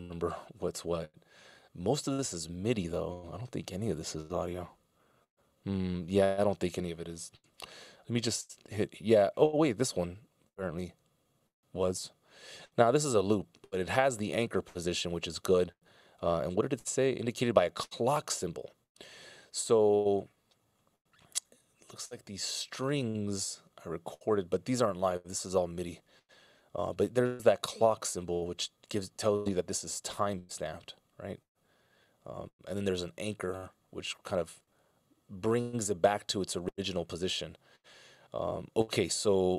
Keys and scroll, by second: 7.3 f, 24.1 Up, 36.3 Up.